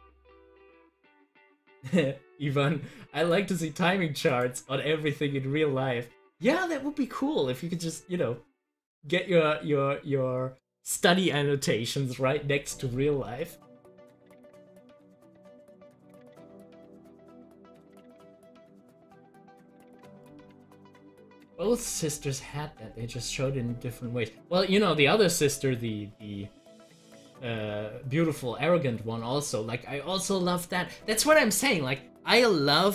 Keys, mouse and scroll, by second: 3.2 click, 17.0 click, 20.0 click.